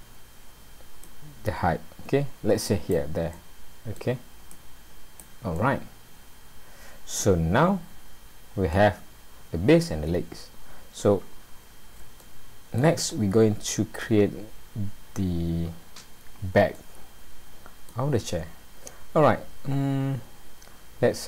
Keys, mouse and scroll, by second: 1.1 click, 3.3 middle click, 4.5 click, 5.6 middle click, 9.2-9.6 scroll up 2, 10.5 scroll up 1, 12.2 shift+middle click, 13.1 middle click, 16.7 middle click, 19.0-19.8 scroll up 3.